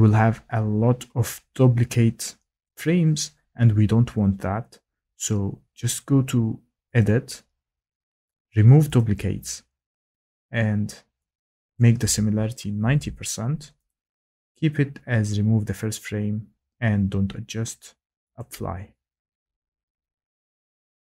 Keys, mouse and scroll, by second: 7.0 click, 9.0 click, 11.7 click, 12.5-13.4 typing, 13.9 click, 18.3 click.